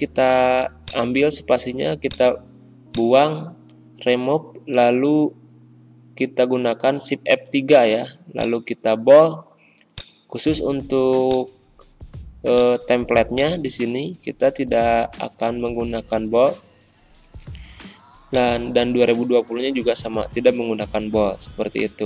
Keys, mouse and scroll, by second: 5.2 shift+F3, 8.3 click, 11.4-17.3 drag, 17.3 ctrl+b, 18.2-19.6 drag, 19.6 ctrl+b, 20.2 ctrl+].